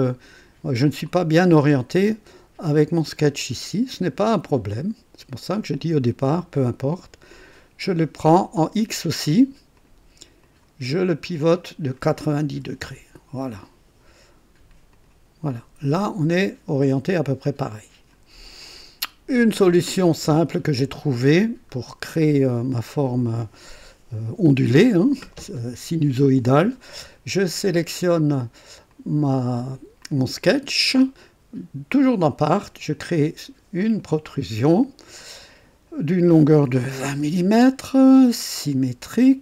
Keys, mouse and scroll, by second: 0.0-0.8 drag, 1.0-2.0 drag, 2.7 click, 4.7 click, 7.3 click, 9.7 click, 10.4 click, 11.2 click, 12.5 KP_9, 12.9 KP_0, 14.9 click, 15.5-18.3 drag, 18.6-20.4 drag, 21.3 scroll up 1, 28.8 click, 30.0 click, 33.7 click, 36.9 KP_2, 37.2 KP_0, 38.7 click.